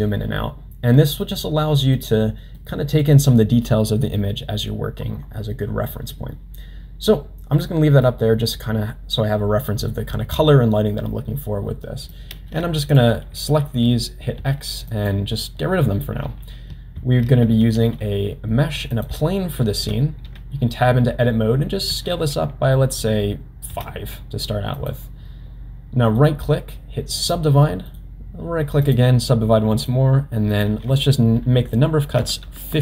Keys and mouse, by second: 1.2 middle click, 2.5 middle click, 7.6-8.1 middle drag, 9.6-10.0 middle drag, 12.1 click, 14.3 x, 17.0 shift+a, 19.7 Tab, 21.9 s, 26.3 right click, 27.9 right click, 30.5 click.